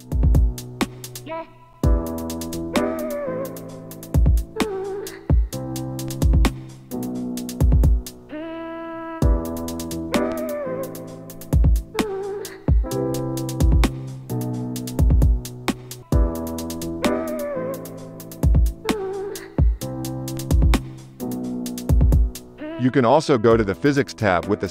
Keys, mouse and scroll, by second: 0.4-5.9 drag, 0.5 space, 1.1 shift+Left, 2.2 space, 2.7 space, 8.8-10.7 drag, 10.9-19.9 drag, 13.6 shift+Left, 13.9 space, 17.7 space, 18.1 shift+Left, 19.9 KP_Divide, 20.7-21.7 drag, 22.2 click.